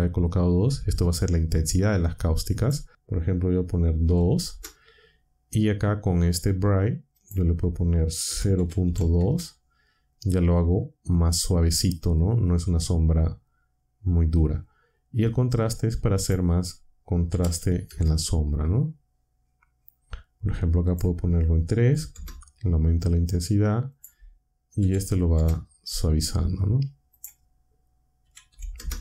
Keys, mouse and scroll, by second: 2.2 click, 3.8-4.5 typing, 7.1 click, 8.0-9.3 typing, 16.1 click, 17.0-18.0 typing, 20.8 click, 21.5-22.3 typing, 23.9 click, 24.5-25.6 typing, 27.1 click, 28.0-29.0 typing.